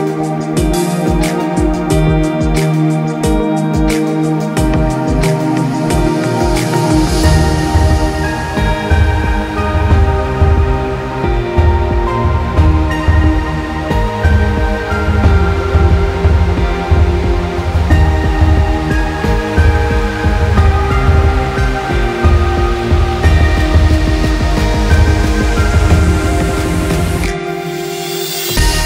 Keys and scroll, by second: 21.5 ctrl+0, 21.7 ctrl+-, 22.1 ctrl+space.